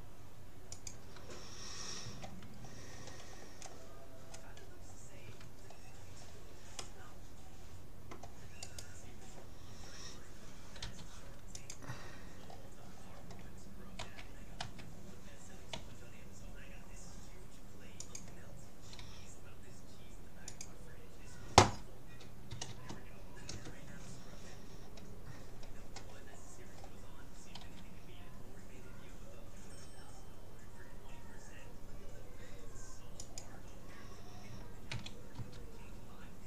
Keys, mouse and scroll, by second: 2.1 a, 2.6-3.6 middle drag, 4.3-5.6 scroll down 1, 5.6-8.6 middle drag, 8.6-10.4 right drag, 10.8 u, 12.4-14.2 middle drag, 14.0 a, 14.6 a, 15.8 s, 19.0 g, 21.6 r, 25.6-28.8 middle drag, 27.6 g, 34.9 s.